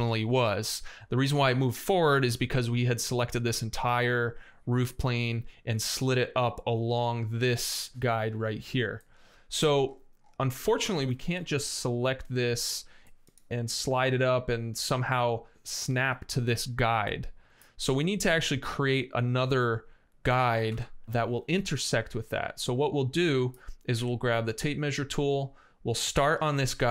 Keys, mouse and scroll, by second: 8.8 middle click, 9.8 right click, 10.1 scroll up 1, 10.2 right click, 10.5 x, 10.8 space, 12.9 middle click, 13.5 m, 20.5 Escape, 20.6-23.3 middle drag, 23.8 t.